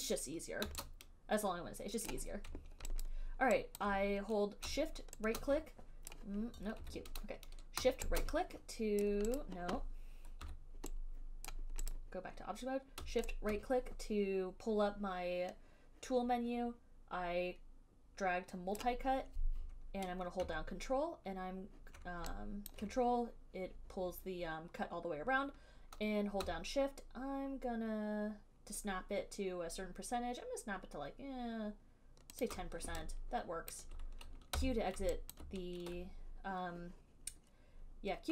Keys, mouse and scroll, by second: 2.3 click, 3.3 alt+click, 4.0 alt+right click, 6.3 right click, 7.0 q, 9.3 right click, 9.6 right click, 10.6 q, 11.7 right click, 12.1 click, 18.9 right click, 23.0 alt+right click, 32.6 click, 33.1 alt+z, 34.7 q, 35.6 alt+click.